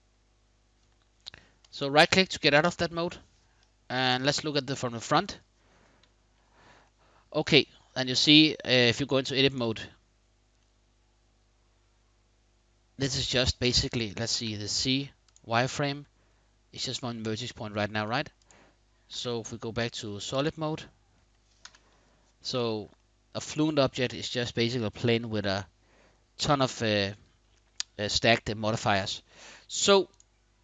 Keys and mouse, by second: 1.4 click, 2.3 KP_5, 3.7 KP_1, 6.6-7.3 shift+middle drag, 8.6 Tab, 10.3-13.3 middle drag, 13.9 z, 15.5 middle click, 16.8 middle click, 17.6 Tab, 18.7 z, 20.5-20.8 drag, 21.3 KP_1, 22.7-23.6 shift+middle drag.